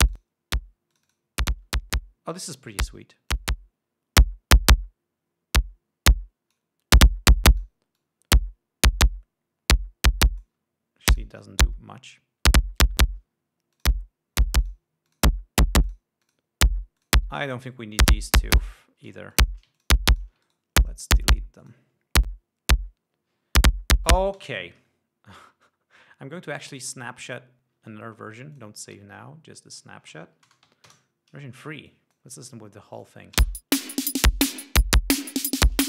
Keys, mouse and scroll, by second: 0.7 click, 1.5 click, 3.9-7.3 drag, 7.6 click, 8.5-11.2 drag, 11.7 click, 14.3 click, 15.2 click, 15.6 click, 16.4 click, 16.8 click, 17.5 click, 18.6 right click, 19.4 click, 19.9 shift+click, 20.3 ctrl+shift+click, 20.7 ctrl+shift+click, 21.0 ctrl+shift+right click, 25.0 space, 25.9 click, 27.3 click, 29.1-30.1 drag, 30.3 click, 31.0 BackSpace, 31.2 3, 31.4 Return, 32.4 click, 33.5 click, 34.1 space.